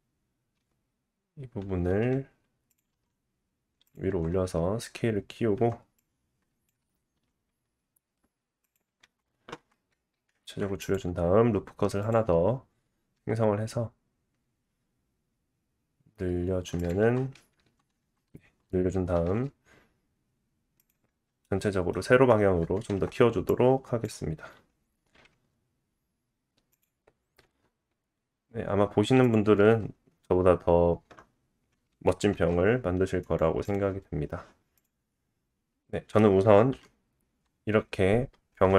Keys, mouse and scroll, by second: 0.5 g, 2.8-6.0 middle drag, 2.9 s, 4.1 Tab, 5.6 Tab, 6.0-8.7 drag, 7.1 s, 8.7-23.5 middle drag, 9.0 Tab, 9.5 Tab, 10.4 ctrl+r, 13.1 s, 17.0 Tab, 19.1 s, 22.0-22.9 scroll down 2, 22.9 Tab, 23.5-26.8 drag, 25.1 g, 26.8 middle click, 27.4 s, 29.6 Tab, 32.3 alt+z, 33.2 right click, 34.8-35.5 drag, 35.1 middle click, 36.7 KP_1.